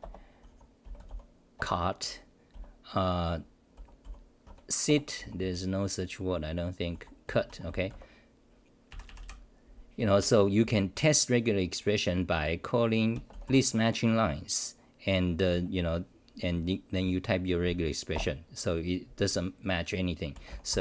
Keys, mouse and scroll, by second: 0.0 Return, 0.4 u, 1.5 Return, 4.5 Home, 4.9 Return, 5.2 u, 7.4-8.4 typing, 8.9 ctrl+=, 10.0 ctrl+=, 10.0 d, 10.1 d, 18.1 Return, 20.7 Delete.